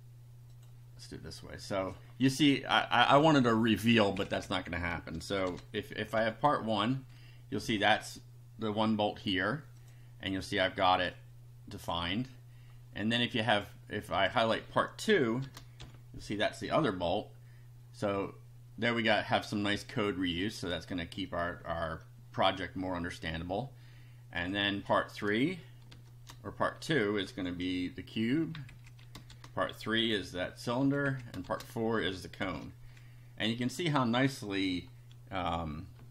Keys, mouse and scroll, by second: 0.6 click, 1.8 click, 2.9 Left, 5.5 shift+3, 6.2 F5, 9.8 click, 11.1 click, 13.5 click, 14.1 click, 15.4 shift+3, 15.8 shift+F5, 18.2 click, 19.7-20.8 drag, 24.4 click, 25.9 shift+3, 27.3 F5, 28.4 Down, 28.7 Left, 29.3 shift+3, 30.0 F5, 30.8 Down, 31.0 Left, 31.5 shift+3, 32.4 F5, 36.0 BackSpace.